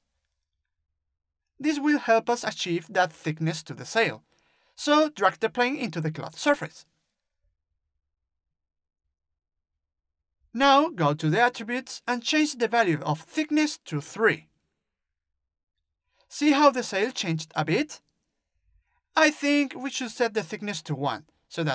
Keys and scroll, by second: 12.5 3, 18.5 2, 20.0 Return, 20.7 1.